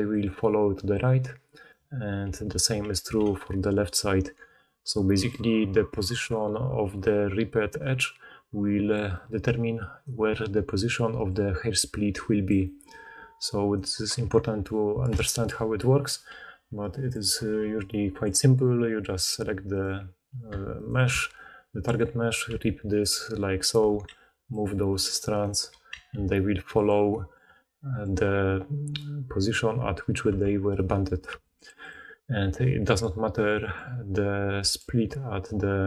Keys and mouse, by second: 1.5 click, 2.2 4, 2.8 g, 6.2-6.8 d, 6.8-17.7 drag, 8.8 d, 8.9 d, 9.0-17.2 middle drag, 9.0-17.2 right drag, 9.0-10.2 d, 11.0 d, 12.4 d, 12.5 d, 13.7 d, 13.8 d, 16.2 g, 17.5 g, 19.8 middle click, 20.6 alt+click, 20.8-23.5 alt+middle drag, 22.4 v, 23.5 click, 23.6-25.2 middle drag, 23.7 4, 24.0 g, 25.2 click, 25.4-26.7 middle drag, 25.5 4, 25.8 g, 30.2 Tab, 30.7-32.3 middle drag, 31.2 b, 32.3 click, 32.4-33.1 middle drag, 33.1 click, 33.2-34.7 middle drag, 34.5 d, 34.7-35.8 drag.